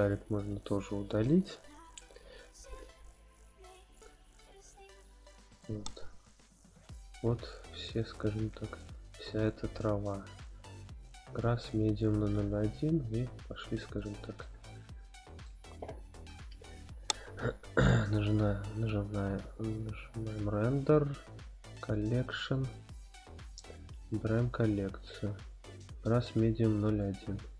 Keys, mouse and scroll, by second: 0.1-0.4 drag, 1.2 x, 3.6 click, 4.4 click, 5.5 click, 6.7 click, 8.0 click, 8.7 click, 9.3 click, 13.8 click, 14.4-15.4 shift+middle drag, 16.0-17.0 scroll down 5, 18.4 click, 18.4 scroll down 2, 20.8-22.0 drag, 22.9 scroll down 1, 24.1-27.1 drag, 24.1-26.5 scroll down 4.